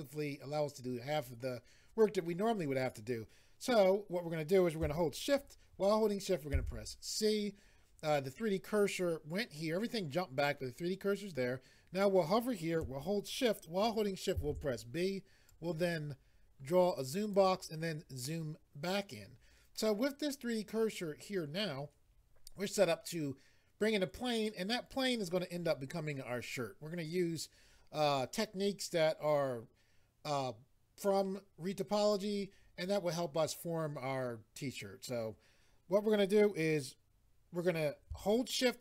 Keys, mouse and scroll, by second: 15.5 click.